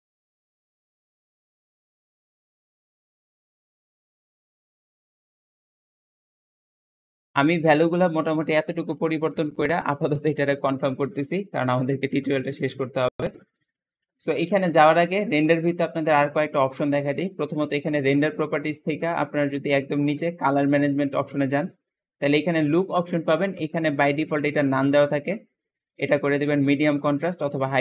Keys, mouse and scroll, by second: 0.2 click, 0.4 KP_0, 0.5 click, 1.1 click, 1.2 middle click, 1.2 KP_0, 2.1 click, 3.8 click, 4.3 click, 7.0 click, 17.0 click, 19.8 click, 20.7-21.7 scroll down 7, 23.8-27.1 drag, 27.7 click.